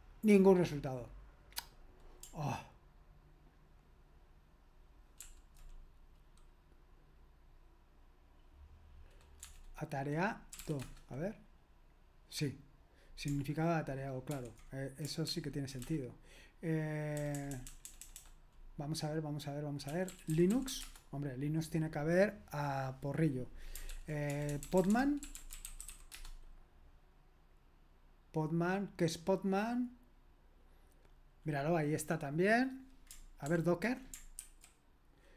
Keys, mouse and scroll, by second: 5.2 ctrl+p, 9.4-11.1 typing, 14.3 ctrl+o, 15.3 ctrl+p, 15.8 BackSpace, 17.2 BackSpace, 17.3 BackSpace, 17.5 BackSpace, 17.6 BackSpace, 19.6-21.2 typing, 23.9 ctrl+p, 24.3-26.5 typing, 33.5 ctrl+p, 34.4 ctrl+w.